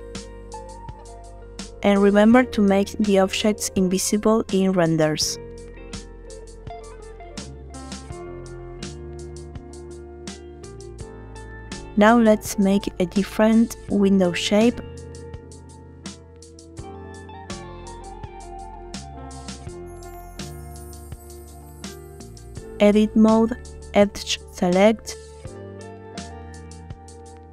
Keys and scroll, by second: 13.1 shift+d, 13.9 Escape, 21.4 Tab, 23.2 2.